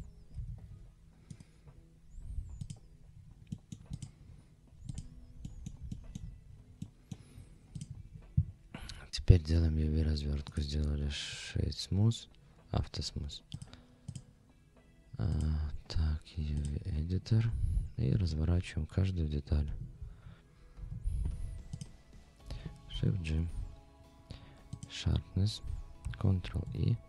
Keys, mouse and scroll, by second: 0.3 a, 0.7 scroll up 2, 1.3-2.7 right drag, 3.1 scroll down 2, 3.5 middle drag, 3.9 click, 4.2-4.7 scroll up 3, 4.9 click, 5.4 middle drag, 5.9 shift+middle click, 6.4-7.0 scroll down 2, 6.8 middle drag, 7.3 scroll up 2, 7.8 click, 8.7 scroll down 1, 10.5-14.1 right drag, 15.3-16.7 drag, 17.1 scroll down 1, 17.8-18.1 scroll down 2, 19.6 n, 20.2 scroll up 2, 20.8 Tab, 21.7 click, 22.9 shift+g, 26.4 ctrl+e.